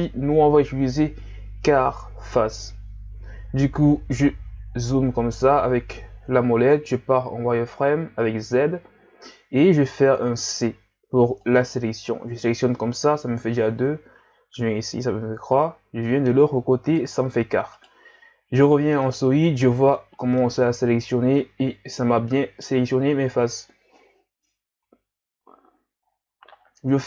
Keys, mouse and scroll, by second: 3.5-4.7 scroll up 5, 4.7-5.1 scroll up 1, 5.5-6.5 scroll up 1, 7.0 z, 10.6 c, 18.4 z, 18.7-19.0 scroll down 3, 19.0-23.0 middle drag, 23.0-23.8 scroll up 3, 24.8 KP_1, 26.1-26.8 scroll down 5.